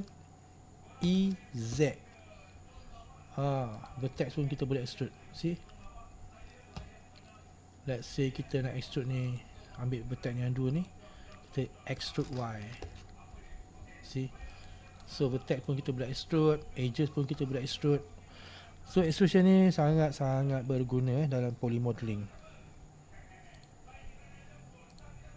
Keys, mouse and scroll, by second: 1.1 e, 4.3-9.4 middle drag, 9.4 right click, 10.9 shift+right click, 12.1 e, 15.2 middle click, 16.1-16.8 scroll up 2, 16.8-17.9 scroll down 2, 17.9-18.9 middle drag, 18.9-19.4 scroll up 2, 19.4-19.9 scroll down 2, 19.9-21.1 middle drag, 21.1-21.8 scroll up 1, 21.8-22.3 scroll down 2, 22.3-22.8 scroll up 2.